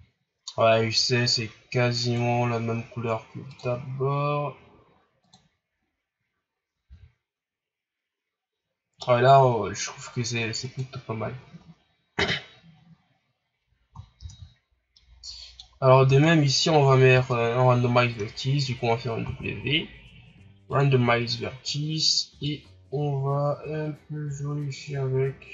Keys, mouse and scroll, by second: 0.1 scroll down 2, 1.1 scroll up 1, 2.0 right click, 3.6 click, 6.8 a, 10.6 right click, 11.3 shift+scroll down 4, 14.3 shift+z, 14.9-15.8 middle drag, 15.8 scroll up 1, 16.1 Tab, 16.8 Tab, 17.1 Tab, 20.8 w, 22.5-25.4 shift+drag.